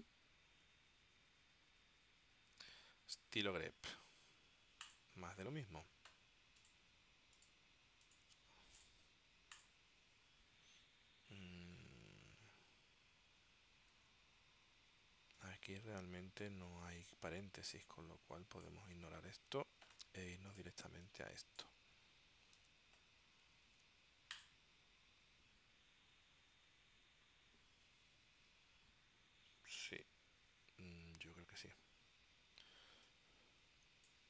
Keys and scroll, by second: 0.0-0.2 typing, 2.1 Tab, 11.6 super+Tab, 14.1 super+Tab, 22.2 super+c, 22.7 super+Tab, 23.8 super+v.